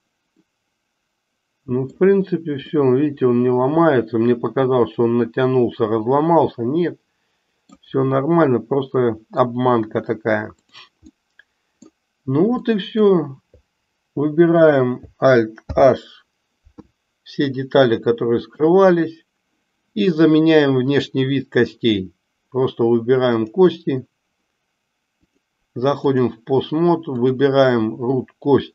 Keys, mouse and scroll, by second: 0.4-2.2 middle drag, 2.8-7.8 middle drag, 8.4 middle click, 11.2 middle click, 12.6 middle click, 15.6 alt+h, 17.4-18.6 middle drag, 20.8-22.4 drag, 23.4 click, 25.3 click, 27.2 click.